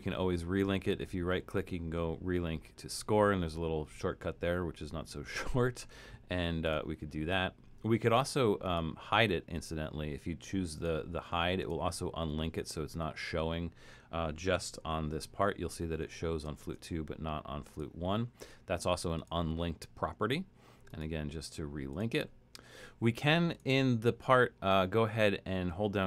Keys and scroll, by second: 15.2 alt+super+., 16.6 alt+super+,.